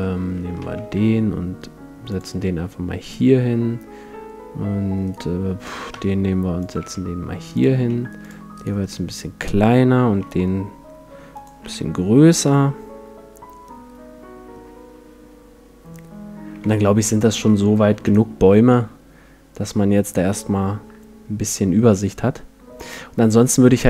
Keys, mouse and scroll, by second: 0.6 shift+d, 2.2-4.9 drag, 2.4 r, 5.1-6.8 right drag, 5.9 shift+d, 6.7 click, 6.9 r, 7.6-10.1 drag, 7.8 s, 8.5-10.1 right drag, 9.0 middle click, 9.1 middle click, 9.4 middle click, 10.1 s, 11.6 a, 11.8-13.4 middle drag, 12.7 click, 13.6 middle click, 13.8 middle click, 14.0 middle click, 14.9 middle click, 16.5 a, 16.7-22.1 middle drag, 17.2 a, 17.9 ctrl+s, 22.7-23.8 middle drag.